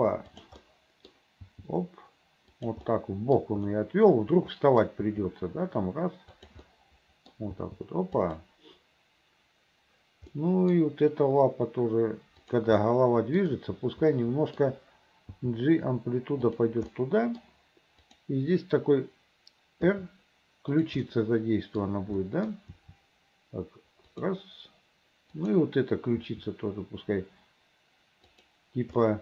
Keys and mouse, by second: 0.8 click, 2.7 g, 3.1 middle click, 3.8-5.0 middle drag, 5.1 g, 6.9 middle click, 7.6 g, 10.5 middle click, 10.7 click, 12.9-14.7 drag, 15.5 g, 17.1 click, 20.8 r, 21.3 click, 22.5 click, 22.8 r, 25.5 click, 26.3 r, 29.1 click.